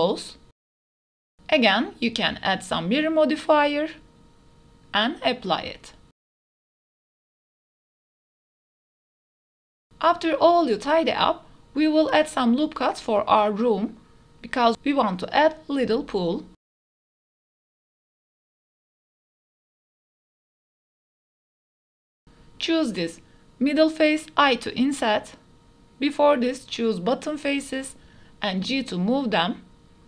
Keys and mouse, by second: 0.0-1.0 typing, 0.7 middle click, 1.3-1.7 middle drag, 1.7 click, 2.1 shift+middle click, 2.3 middle click, 2.5 shift+middle click, 2.9 middle click, 3.0 ctrl+a, 3.3 click, 4.0-6.0 drag, 6.4 click, 8.2-8.6 drag, 8.9 middle click, 9.4 Tab, 9.9 g, 10.0 y, 10.4 Tab, 10.8 click, 11.1 shift+d, 11.3 y, 12.5 click, 12.7 d, 12.9 click, 13.2-13.7 middle drag, 13.7 Tab, 14.1 shift+click, 14.5 ctrl+r, 15.2 click, 16.5 g, 16.9 g, 17.5 middle click, 17.7 middle click, 17.9 middle click, 18.2 ctrl+r, 18.5 click, 18.8-20.3 typing, 22.0 middle click, 22.2 shift+middle click, 22.4 middle click, 22.8 3, 23.8 i, 25.2 middle click, 25.8 3, 25.9 middle click, 26.2 shift+click, 26.4 middle click, 26.7 middle click, 27.8 shift+click, 27.9 middle click, 28.0 click, 28.1 middle click, 28.3 g, 28.4 z, 29.4 click, 29.6 middle click.